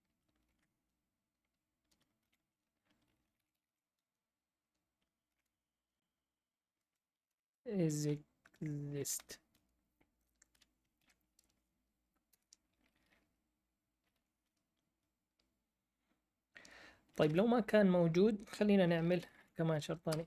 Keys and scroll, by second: 0.4 shift+9, 2.2-4.2 typing, 5.3 ), 6.7-11.4 typing, 12.3 Return, 13.7-14.5 typing, 17.1 BackSpace, 17.2 BackSpace, 18.8-19.8 typing, 20.1 Return.